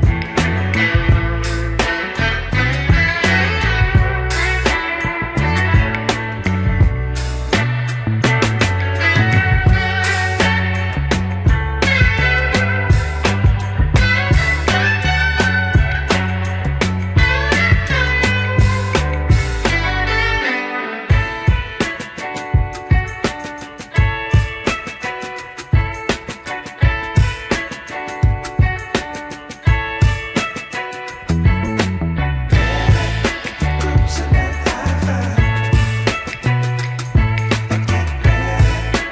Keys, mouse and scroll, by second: 0.2-2.5 drag, 3.0 click, 3.1-4.4 right drag, 5.9 click, 6.9 click, 7.5 click, 8.1 click, 8.6 drag, 9.3 click, 10.2 click, 10.9-14.4 drag, 16.9 click, 17.1 Tab, 19.0 ctrl+r, 23.9 click, 25.0 Tab, 25.8 click, 25.9 Tab, 28.4 ctrl+r, 32.1 Tab, 32.7 Tab, 34.1 scroll up 1, 34.8 Tab, 35.1 click, 35.9-36.7 scroll down 3, 36.3-36.8 middle drag, 37.0 click, 37.3 Tab, 37.7 click, 38.7 3, 38.8 click.